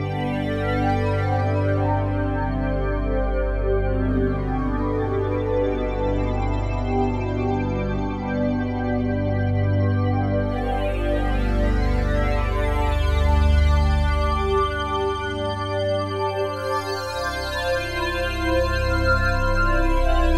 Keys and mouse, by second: 3.4 space, 4.4 space, 10.4-14.9 drag, 17.8 click.